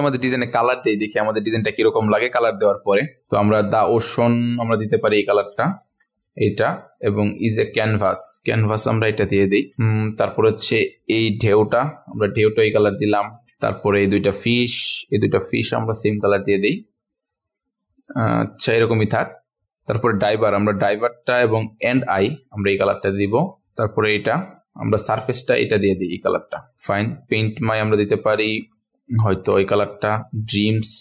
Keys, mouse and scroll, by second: 0.8-2.9 ctrl+alt+scroll down 1, 3.6 click, 6.1 click, 8.5 i, 9.0 click, 9.8-10.6 ctrl+alt+scroll up 1, 10.6 click, 14.6 shift+click, 17.1 click, 19.0 click, 19.8 click, 21.8 shift+click, 23.0 click, 26.7-27.3 scroll down 1, 27.3 click, 30.0 v, 30.9 i.